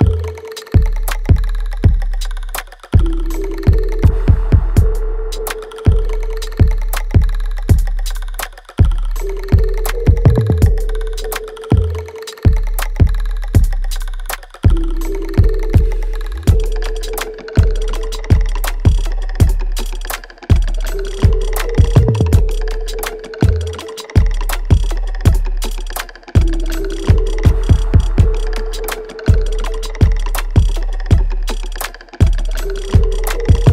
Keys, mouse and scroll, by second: 1.1 alt+middle click, 2.7 alt+middle click, 3.1 alt+right click, 4.8 click, 9.7 shift+click, 10.5 alt+click, 11.1 alt+middle click, 13.5 click, 16.8 alt+right click, 17.5 alt+click, 18.6-20.2 alt+right drag, 20.2-21.9 drag, 21.9-24.9 ctrl+drag, 24.9 right click, 25.6 click, 25.8 alt+right click, 27.0 click, 27.4-29.4 alt+drag, 29.4 alt+right click, 30.1 alt+middle click, 30.6 click, 30.6 click, 30.9-32.8 right drag, 32.8 alt+right click.